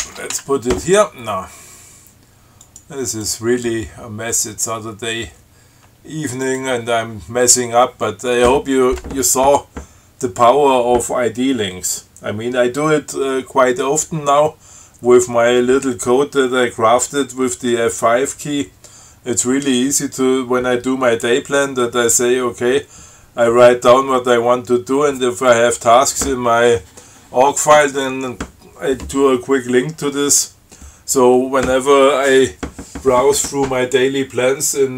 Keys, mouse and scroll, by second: 0.3 ctrl+x, 0.6 ctrl+1, 2.9 click, 3.4 click, 6.7 click.